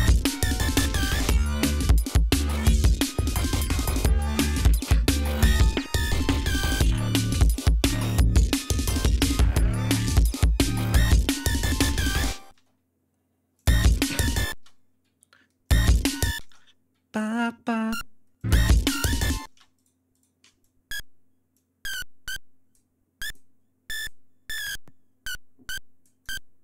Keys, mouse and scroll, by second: 1.1-1.4 scroll down 2, 1.7 ctrl+scroll up 2, 2.7 scroll down 2, 3.4 scroll up 2, 4.1 scroll up 2, 6.8-7.3 scroll up 2, 7.7-8.2 scroll down 2, 10.8-11.2 scroll down 2, 12.1 space, 12.2-12.6 scroll up 2, 12.9 click, 13.1 space, 13.3-14.3 ctrl+scroll up 6, 13.9 space, 14.3-15.1 ctrl+scroll down 2, 15.1 click, 15.3 space, 15.8 d, 15.9 space, 17.2 click, 17.8 click, 18.0 space, 19.0 space, 19.2 shift+right click, 19.6 shift+right click, 20.1 shift+click, 21.0-22.4 drag, 22.7 click, 23.4 click, 24.0-26.0 drag, 26.4-26.6 drag.